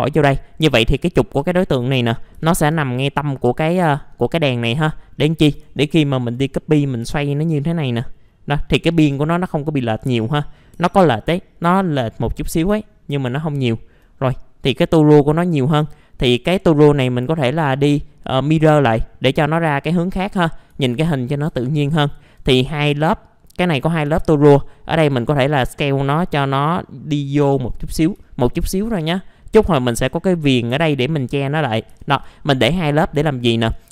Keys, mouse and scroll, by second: 0.3-3.0 middle drag, 2.1-3.1 typing, 3.1-4.9 scroll up 1, 4.9 scroll down 1, 5.5 scroll down 1, 5.9 alt+middle click, 7.3 shift+click, 9.6 alt+middle click, 10.8 F4, 12.1-12.7 scroll down 1, 12.8 alt+middle click, 15.1 middle click, 15.9-17.0 alt+middle drag, 17.6 click, 20.8 alt+middle click, 21.5 F4, 22.0 alt+middle click, 22.5 scroll up 1, 23.0-24.0 middle drag, 24.1 r, 24.7 scroll up 1, 25.7-28.0 drag, 28.2 alt+middle click, 29.0 F4, 29.4 middle click, 29.7 alt+middle click, 31.4-31.9 scroll down 1, 31.9 typing, 32.5 middle click, 32.6 scroll down 1, 32.8 F4, 33.3 middle click, 33.7 click.